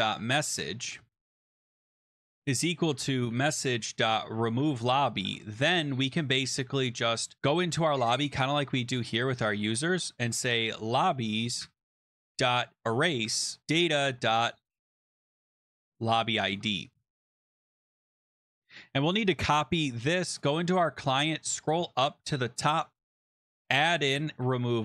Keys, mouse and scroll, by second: 0.0-5.6 typing, 8.1 scroll down 2, 9.3 click, 9.6-18.4 typing, 11.6 Tab, 18.4 ctrl+s, 18.6 click, 18.8 click, 19.5 ctrl+c, 20.4 click, 20.8-22.1 scroll, 22.9 click, 23.4 ,, 23.5 Return, 23.6 ctrl+v, 24.3 ctrl+s, 24.7-24.8 scroll.